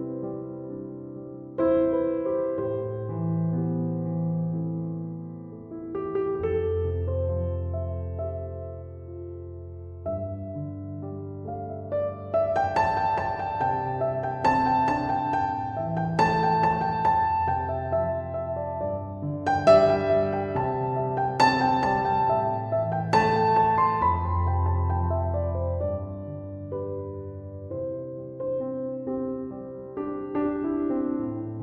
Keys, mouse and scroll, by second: 10.9 m, 11.0 o, 11.3 v, 11.4 e.